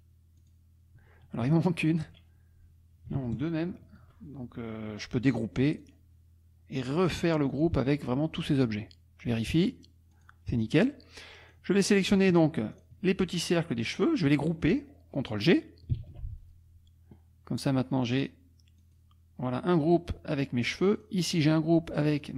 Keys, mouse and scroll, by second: 1.5 shift+click, 5.8 click, 7.5 click, 9.7 click, 10.3 click, 10.7 click, 11.4 click, 12.3 shift+click, 12.7 shift+click, 16.0 ctrl+g, 18.1-19.5 drag, 20.9 click, 22.2 click.